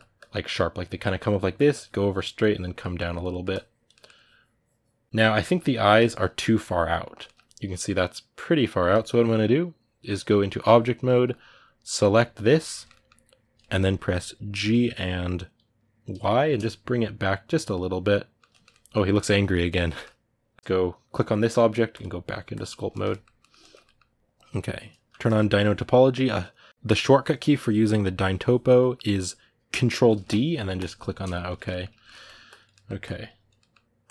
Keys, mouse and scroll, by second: 1.1 middle click, 1.5-3.1 drag, 3.1 middle click, 3.3 click, 3.7 middle click, 3.9-5.0 drag, 5.0-10.6 ctrl+middle drag, 10.6 click, 10.9 ctrl+middle click, 11.6 right click, 12.2-14.4 ctrl+middle drag, 14.4 g, 17.5-20.5 middle drag, 20.5-22.4 right drag, 22.4 click, 22.7-32.2 ctrl+middle drag, 32.2 click, 32.5 middle click, 32.8 click, 33.4 middle click, 33.8-34.1 drag.